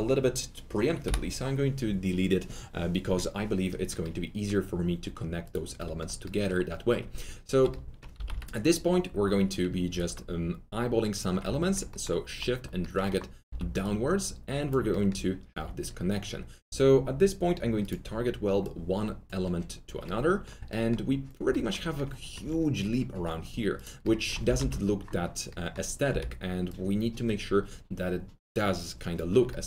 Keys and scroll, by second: 1.0 2, 5.7 Delete, 7.5 w, 8.1 alt+t, 15.5 1, 20.1 1, 24.4 alt+t, 26.0 s.